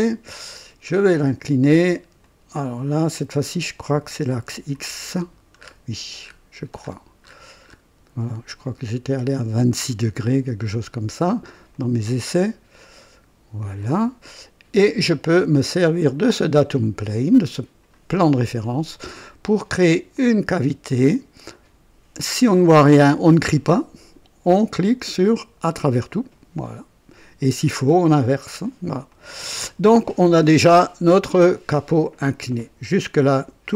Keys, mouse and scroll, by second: 0.0 Return, 0.4 click, 2.2-3.1 drag, 4.5 click, 5.0-5.5 scroll down 1, 5.6 scroll up 1, 5.6 typing, 6.2-6.5 scroll up 1, 6.7-7.9 scroll up 3, 9.0 scroll up 1, 11.7-12.4 drag, 13.0 click, 13.8-15.6 drag, 16.8 click, 20.1 click, 24.7 click, 25.6 click, 29.0 click, 30.2-32.2 drag.